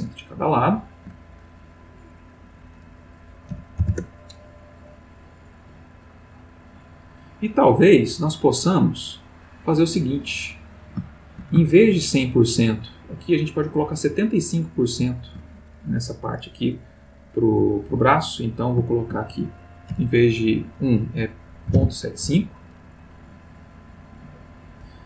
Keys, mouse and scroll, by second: 0.0 shift+click, 2.3 click, 3.5 ., 3.8 5, 3.9 Return, 5.4 click, 6.5 click, 7.1 click, 9.2-11.0 drag, 11.6 shift+click, 13.2 shift+click, 14.4 shift+click, 17.6 click, 18.9 ctrl+click, 19.9 ., 21.7 7, 22.2 Return, 23.9 click.